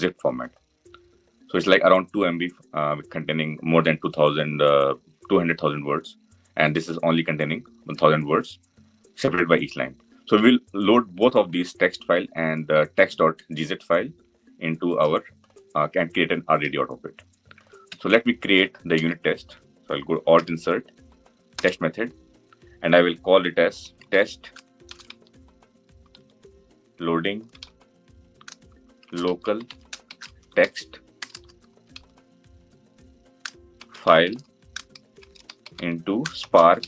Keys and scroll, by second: 17.7 Tab, 20.3 alt+Insert.